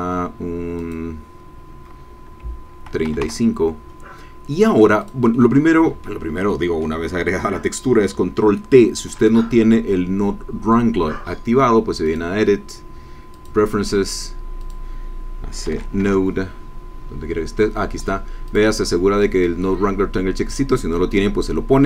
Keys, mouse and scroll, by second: 0.8-2.8 drag, 3.0 KP_5, 3.2 KP_Enter, 5.0 click, 5.3-7.0 drag, 12.0 click, 13.3 click, 14.6 click, 15.5 n, 15.6 o, 15.9 d, 16.0 e, 18.4 click.